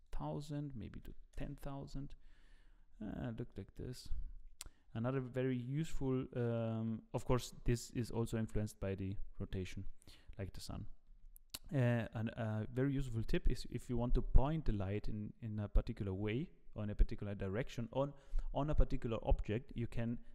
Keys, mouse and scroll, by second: 2.4-2.9 scroll up 4, 3.5 middle click, 4.1 scroll down 7, 4.7 middle click, 5.5 middle click, 7.5 r, 11.6-11.9 scroll up 3, 12.1 middle click.